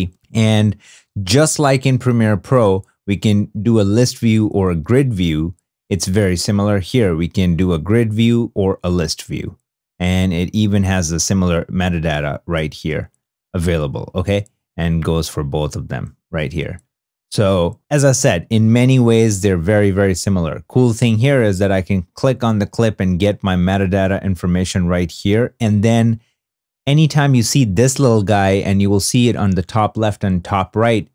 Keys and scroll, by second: 1.4 super+Tab, 5.8 super+Tab.